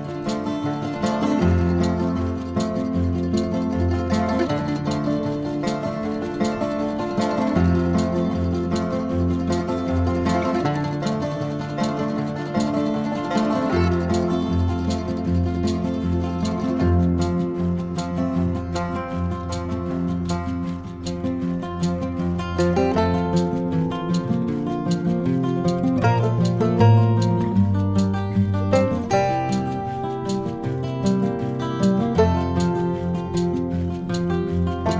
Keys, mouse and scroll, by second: 0.7-1.2 ctrl+middle drag, 2.7-3.5 middle drag, 4.2 KP_3, 6.3-7.6 middle drag, 8.0 click, 8.6 Tab, 10.5 click, 11.0 ctrl+r, 14.9 click, 17.4 shift+d, 22.0 Tab, 22.2 click, 24.0 Tab, 25.8 alt+click, 26.8 shift+click, 27.5 shift+click, 28.6 e, 30.2 middle click, 31.5 click, 32.1 shift+click, 32.7 shift+click.